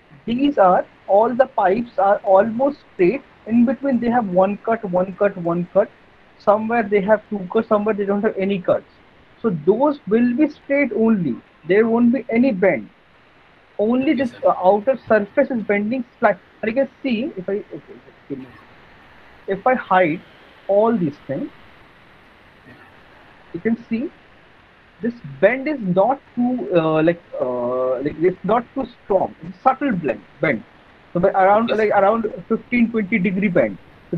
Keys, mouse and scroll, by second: 0.3 alt+middle click, 2.0 middle click, 2.9 middle click, 3.3 middle click, 7.2 middle click, 10.0 middle click, 13.6 middle click, 14.2 middle click, 14.7 middle click, 15.7 alt+middle click, 16.3 middle click, 17.1 alt+middle click, 17.5 middle click, 18.1 alt+middle click, 18.8 middle click, 19.4 alt+middle click, 20.0 alt+middle click, 21.2 click, 22.6 right click, 23.5 click, 24.9 alt+middle click, 25.3 middle click, 25.6 middle click, 26.6 alt+middle click, 27.0 middle click, 27.5 middle click, 27.7 alt+middle click, 28.3 alt+middle click, 28.6 middle click, 28.8 middle click, 29.6 alt+middle click, 30.0 middle click, 30.3 middle click, 31.5 middle click, 31.7 middle click, 31.9 alt+middle click, 32.8 alt+middle click, 33.3 middle click.